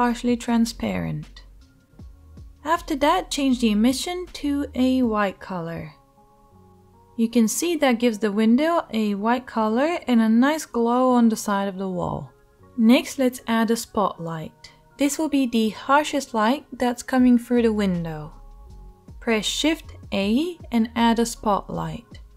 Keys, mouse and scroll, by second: 3.6-19.9 right drag, 17.7 shift+a, 19.9-22.3 drag.